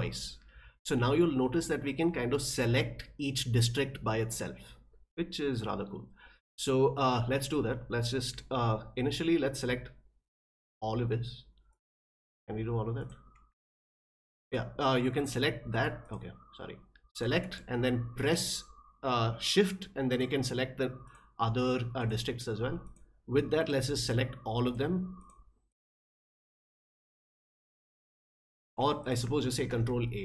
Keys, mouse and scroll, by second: 9.2-10.7 drag, 11.7 click, 13.0 click, 13.7 shift+click, 15.1 click, 16.0 click, 17.1 click, 20.1 shift+click, 21.0 shift+click, 22.0 shift+click, 22.8 shift+click, 23.6 shift+click, 24.0 shift+click, 24.6 shift+click, 25.2 shift+click, 25.7 shift+click, 26.5 shift+click, 27.0 shift+click, 27.5 shift+click, 28.2 shift+click, 29.0 click, 29.6 ctrl+a.